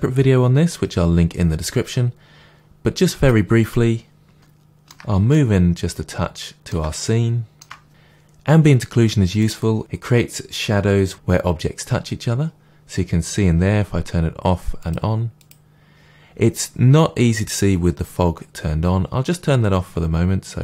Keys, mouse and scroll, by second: 3.1 click, 4.3-9.4 shift+middle drag, 9.4 click, 14.9 click.